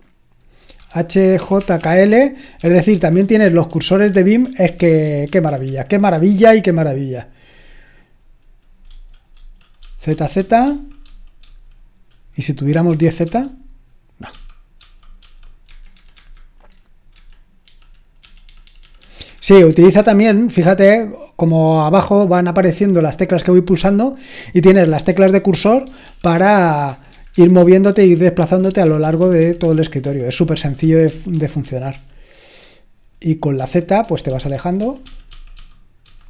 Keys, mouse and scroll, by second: 0.7-6.0 typing, 8.9-11.4 typing, 12.9-13.2 typing, 14.3-20.0 typing, 24.8-31.9 typing, 33.6-36.2 typing.